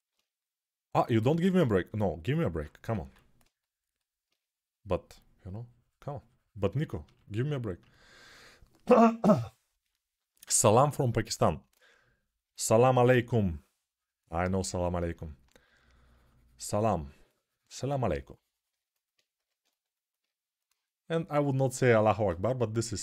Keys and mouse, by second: 0.8-23.0 alt+drag, 2.8 6, 19.1 g.